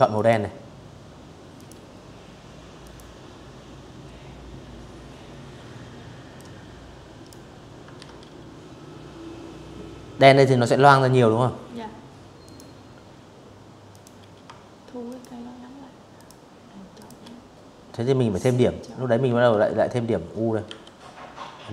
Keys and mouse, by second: 0.5 click, 4.0 click, 5.6 ctrl+z, 10.1 click, 11.6 click, 12.7 shift+click, 13.8 shift+click, 14.6 shift+click, 16.9 a, 18.3 u, 19.6 click.